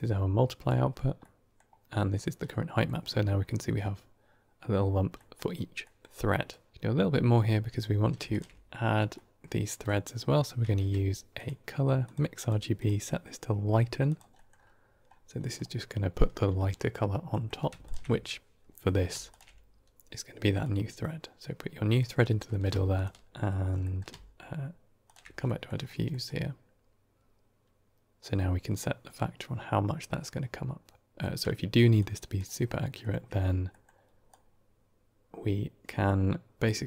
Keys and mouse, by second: 1.1-1.4 middle drag, 2.3 middle click, 5.2 middle click, 5.8 middle click, 6.4-7.7 drag, 8.2 ctrl+shift+click, 9.0 middle click, 9.7 middle click, 10.6 shift+a, 12.6-14.0 drag, 14.2 middle click, 15.3 middle click, 16.8 middle click, 17.3 middle click, 17.7 ctrl+shift+click, 19.2 ctrl+shift+click, 20.5-21.9 drag, 22.4 middle click, 22.8 ctrl+shift+click, 23.3 middle click, 23.8 middle click, 24.9 ctrl+shift+click, 25.3 middle click, 26.0 middle click, 28.1-31.1 drag, 31.1 middle drag, 31.9-32.2 drag, 33.7 middle click, 34.2-35.9 drag, 36.7 click.